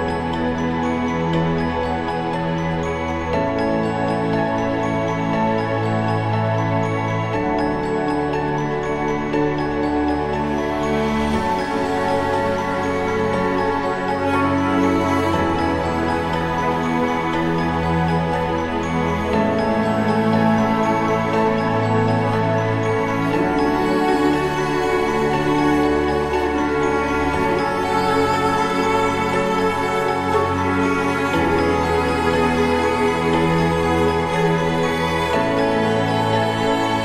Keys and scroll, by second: 3.6 ctrl+-, 5.0 ctrl+0, 11.4 ctrl+=, 11.7 ctrl+=, 11.9 ctrl+=, 16.7 ctrl+=, 18.5 ctrl+=, 33.6 ctrl+=.